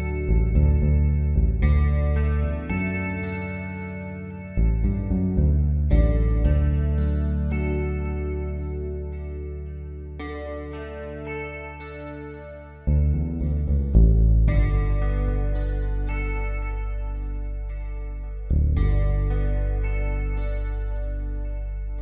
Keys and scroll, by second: 0.8-1.5 typing, 4.3 space, 7.0 ctrl+alt+z, 7.3-8.0 typing, 9.0 space, 10.5 space, 13.3-14.5 typing, 16.5 space, 20.7 space.